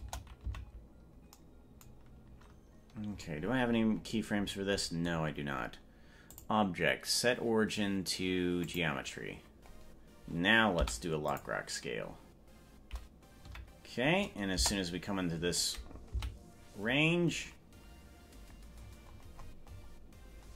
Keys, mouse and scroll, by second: 0.1 KP_0, 0.7 Right, 3.1-3.5 scroll down 2, 3.3 scroll up 1, 3.5-4.3 scroll down 15, 4.5-5.5 scroll up 22, 6.3-8.8 drag, 10.7 i, 13.5 KP_Decimal, 14.6 KP_0, 16.5 Right, 18.9-20.5 scroll up 32.